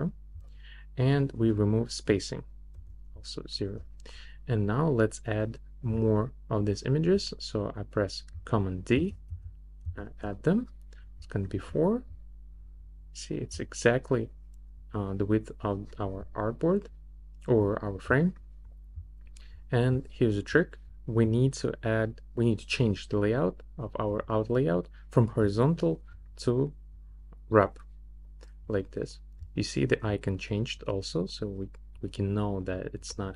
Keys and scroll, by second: 2.7 0, 9.0 super+d.